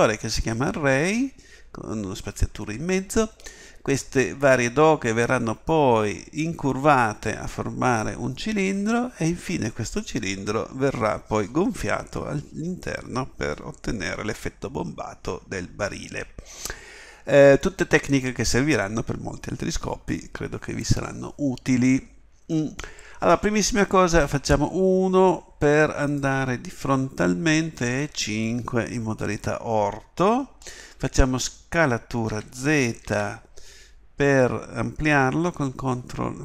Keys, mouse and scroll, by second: 26.1 middle click, 26.8 KP_1, 27.7 KP_5, 32.3 s.